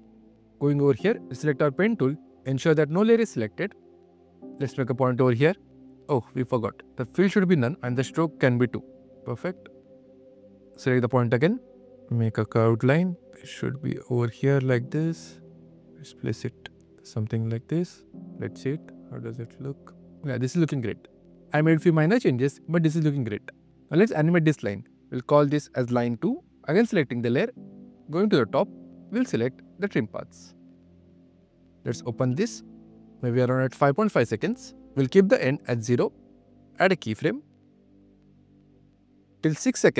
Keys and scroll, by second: 0.0 q, 17.8 super+Tab, 18.1 q, 25.7 Return, 26.5 q, 30.7 q.